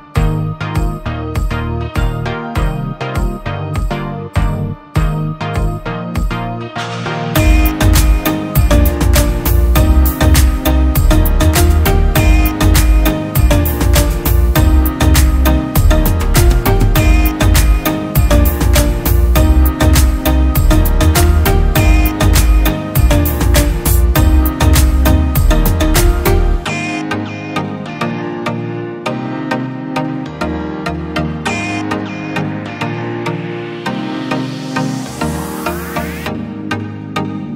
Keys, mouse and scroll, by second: 9.2 ctrl+z, 10.1 alt+BackSpace, 11.0 ctrl+t, 12.1 ctrl+click, 13.6 ctrl+click, 18.8 ctrl+click, 23.2 ctrl+click, 25.1 Return, 25.4 ctrl+t, 26.4 ctrl+click, 29.0 Return.